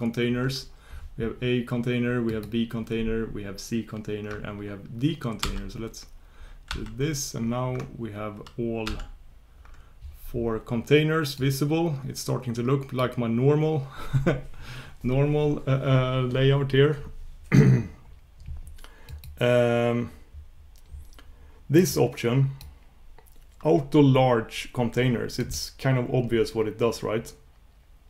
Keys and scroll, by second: 6.7 shift+super+k, 8.9 super+p.